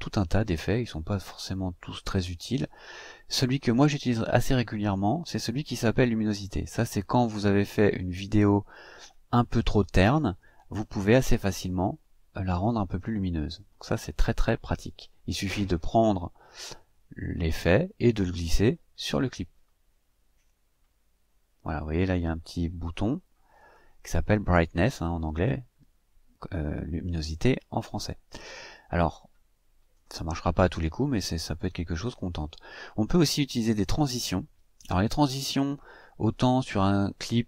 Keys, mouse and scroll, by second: 6.0 click, 15.5-20.4 drag, 23.3 click, 33.6 click, 35.8-37.4 drag.